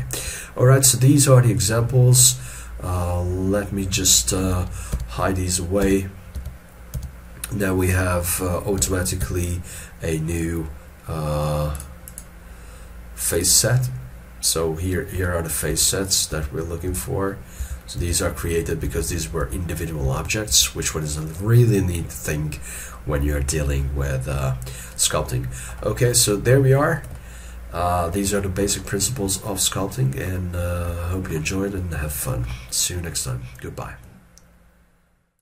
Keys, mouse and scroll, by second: 0.0-0.4 scroll down 1, 0.4 shift+middle click, 0.9 scroll up 1, 1.1 scroll down 1, 1.3 middle click, 5.0 h, 12.2 double click, 15.3 h, 25.4 shift+middle click, 25.9 middle click, 27.3 ctrl+middle click, 28.4 shift+middle click, 29.3 middle click, 29.5 ctrl+middle click, 30.8 shift+middle click, 31.1 shift+middle click.